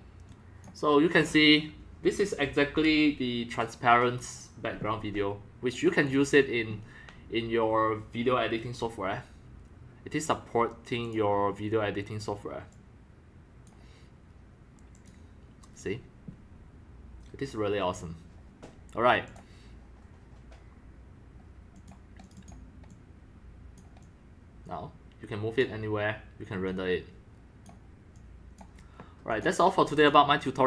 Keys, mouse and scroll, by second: 1.1 drag, 1.2-4.8 drag, 5.4-5.9 drag, 6.2 drag, 6.8-9.7 drag, 10.5-10.9 drag, 11.1 click, 12.0 click, 12.7-13.8 drag, 14.9 click, 16.6-18.3 drag, 18.4 click, 19.3 click, 21.7 click, 22.2 click, 22.3 click, 22.9-23.8 drag, 24.0-25.6 drag, 26.7 click, 28.1-28.6 drag, 29.3 click, 30.0 click.